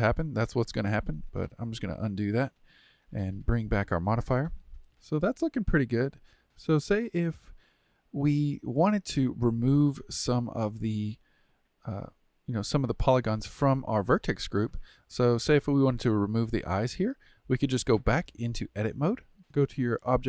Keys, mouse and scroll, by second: 2.0 ctrl+z, 3.3 ctrl+z, 4.9 middle drag, 5.7-6.4 shift+middle drag, 6.4 click, 8.4-10.7 middle drag, 10.7 scroll down 2, 11.6-17.6 shift+middle drag, 17.6 Tab, 19.4 click.